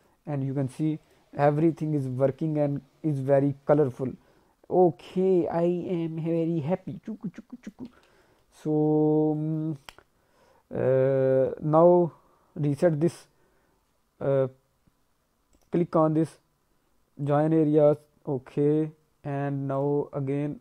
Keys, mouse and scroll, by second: 0.0 click, 1.0 click, 1.5 scroll down 1, 1.7 middle click, 2.1 alt+middle click, 2.5 middle click, 3.9 click, 8.0 ctrl+z, 8.2 middle click, 8.5 alt+middle click, 9.0 scroll up 2, 9.3 middle click, 9.7 alt+middle click, 10.8 scroll up 1, 11.1 alt+middle click, 15.5 right click, 19.7 click.